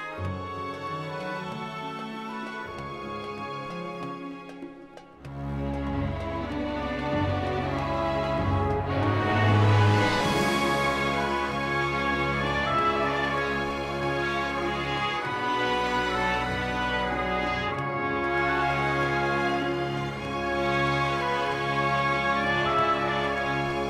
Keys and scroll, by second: 1.5 shift+z, 5.0 3, 7.9 i, 12.6 i, 16.8 1, 18.2 k.